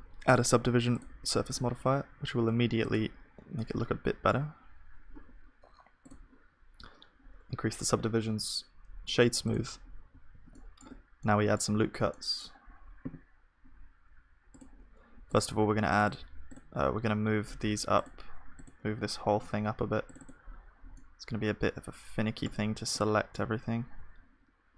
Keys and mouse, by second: 2.9 click, 3.6-8.7 middle drag, 8.7 F3, 10.3 ctrl+s, 10.5-14.1 middle drag, 10.8 Tab, 20.9-22.2 drag, 20.9-24.7 middle drag, 23.3-24.7 drag, 23.3-24.7 right drag.